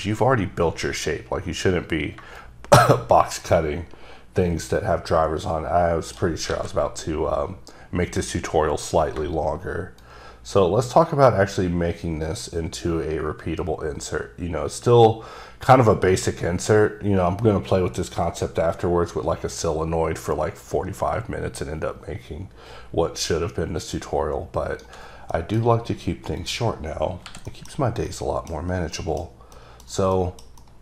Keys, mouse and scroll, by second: 2.5 shift+right click, 6.6 alt+a, 6.8-7.1 alt+scroll down 3, 7.1 middle click, 10.1-22.1 shift+right drag, 25.5 middle click, 26.5 click, 27.2 scroll down 2, 27.4 h, 27.6 middle click, 27.9 scroll up 1, 28.2 middle click, 28.7 scroll up 3, 29.1 middle click, 30.0 middle click, 30.3 middle click, 30.7 double middle click.